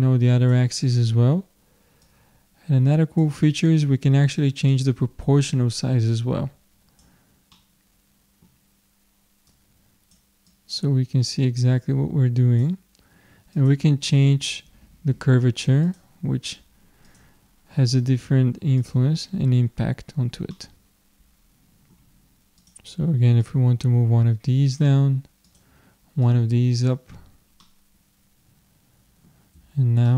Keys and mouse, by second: 4.9-6.5 drag, 7.5-9.6 middle drag, 9.6-12.4 drag, 13.6-15.5 drag, 17.1-18.8 drag, 20.6-22.0 middle drag, 22.6-25.2 drag, 25.5-27.2 drag, 27.2-29.6 middle drag, 29.6 Tab, 29.9 middle click.